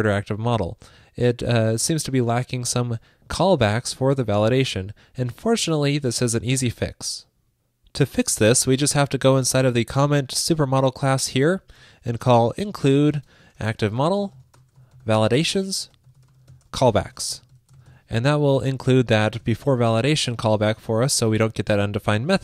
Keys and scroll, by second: 19.5 super+s.